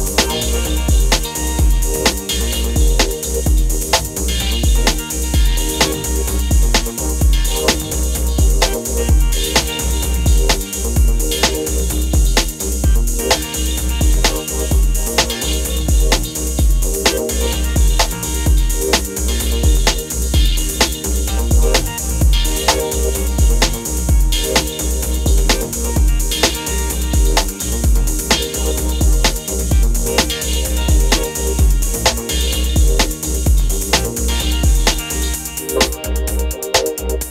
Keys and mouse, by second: 0.0 middle click, 2.3 click, 2.3 right click, 2.8 middle click, 4.0 middle click, 4.3 middle click, 7.7 middle click, 8.7 middle click, 9.6-11.1 drag, 11.2 click, 11.9 middle click, 12.0 middle click, 12.2 middle click, 13.2 middle click, 13.4 middle click, 15.1-16.8 drag, 16.8 middle click, 18.7 middle click, 19.2-20.6 middle drag, 20.7 middle click, 20.9-21.3 middle drag, 21.5 middle click, 21.6-22.1 middle drag, 23.8 middle click, 24.0 middle click, 25.6 click, 26.6 click, 26.7 click, 27.3 middle click, 27.5 middle click, 30.4 middle click, 31.0-32.6 drag, 32.4 right click, 32.4 middle click, 32.7 click, 32.7 right click, 32.8 middle click, 35.4-37.3 middle drag.